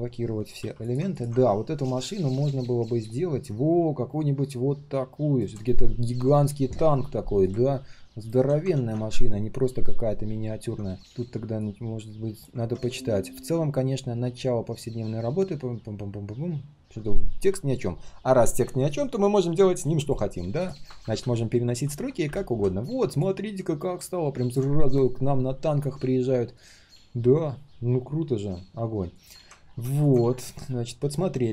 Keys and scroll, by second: 8.7 ctrl+z, 12.5 ctrl+z.